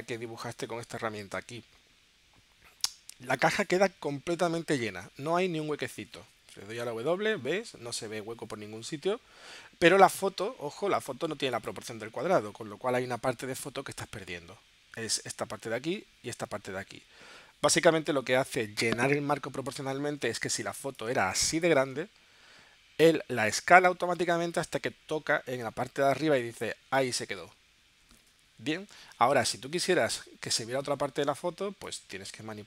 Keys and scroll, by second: 7.2 w, 8.9 w.